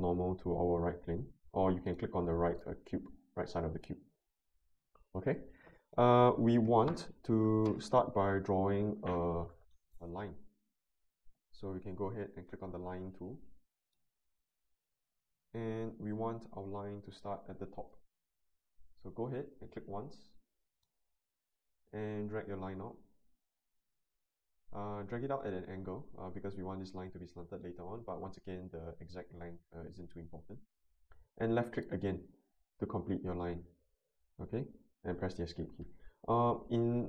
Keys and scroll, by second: 35.2 Escape.